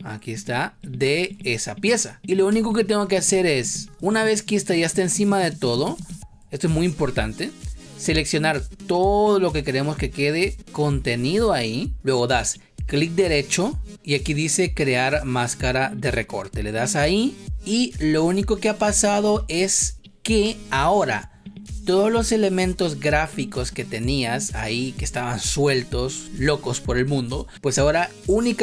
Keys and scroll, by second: 2.4 space, 5.9 ctrl+z, 20.4 space.